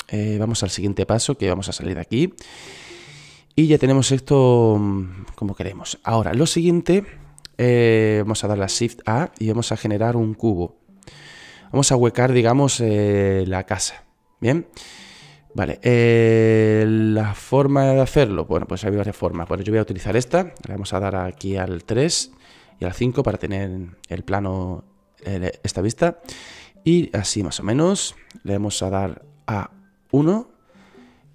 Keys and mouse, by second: 5.6 click, 6.1 click, 10.4 shift+a, 14.5 s, 18.1-19.2 drag, 19.7 click, 21.7 KP_1, 23.0 KP_3, 24.4 KP_5, 27.7 click.